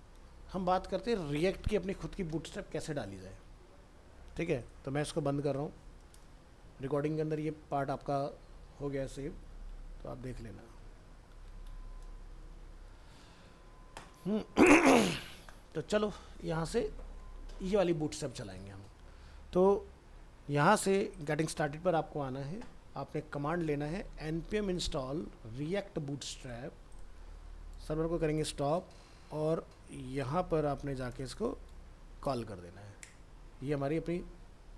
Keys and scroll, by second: 3.5 alt+Tab, 9.2 ctrl+End, 12.5 ctrl+s, 14.1 alt+Tab, 25.2 ctrl+c, 31.7 ctrl+v.